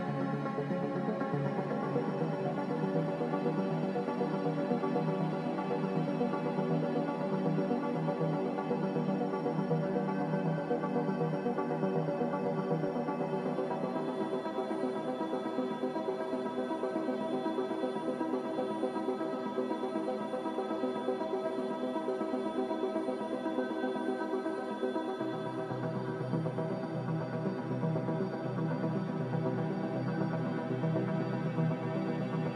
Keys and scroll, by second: 0.0 x, 1.9 z, 7.8 a, 13.7 z, 18.1 5, 18.3-21.2 Return, 21.0 a, 29.3 s, 31.3 typing.